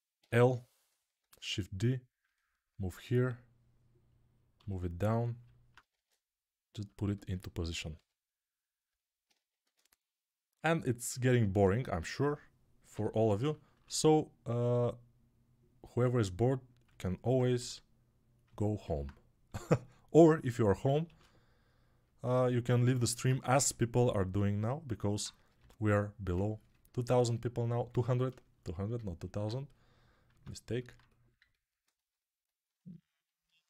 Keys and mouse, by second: 0.0 l, 1.1 shift+d, 2.3-4.1 alt+drag, 4.4 g, 5.1-12.5 alt+drag, 5.8 shift+d, 7.8 g, 9.5 shift+d, 12.8 l, 13.7 shift+d, 15.7 s, 17.4 g, 19.4 g, 20.9 shift+d, 23.5 g, 24.8-28.9 alt+right drag, 25.4 g, 30.2 Tab.